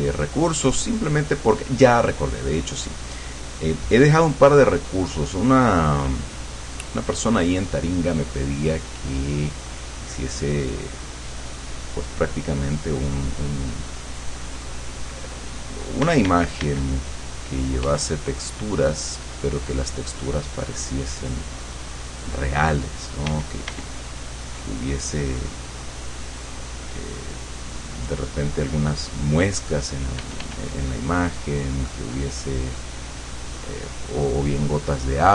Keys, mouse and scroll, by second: 0.0-1.8 drag, 2.8-8.0 drag, 8.4-9.9 drag, 10.3-15.6 drag, 16.1 d, 16.8-18.0 drag, 17.9 f, 18.1-30.1 drag, 23.3 d, 30.2 click, 30.2 f, 30.6-35.3 drag.